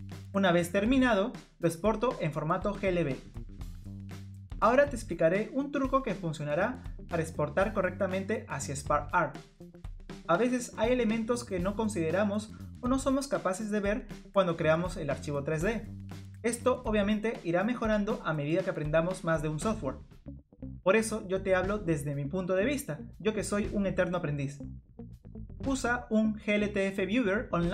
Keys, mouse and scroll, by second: 0.8 scroll down 3, 1.2 middle click, 1.2 scroll up 1, 2.8 scroll down 2, 2.9 click.